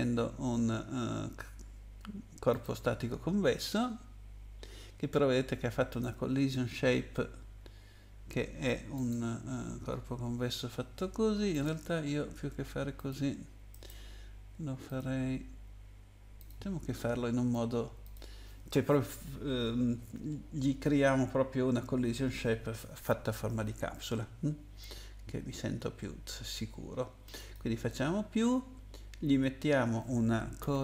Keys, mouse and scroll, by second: 2.5 click, 5.9 click, 8.9 click, 11.5 click, 13.0 click, 13.7 right click, 14.9 click, 16.4 click, 18.0 click, 27.4 click, 30.3-30.8 typing.